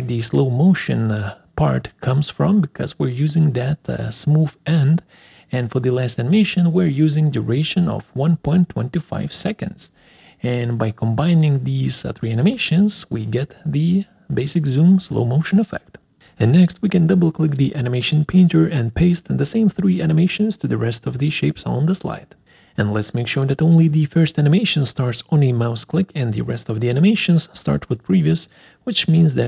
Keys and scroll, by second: 9.7 1.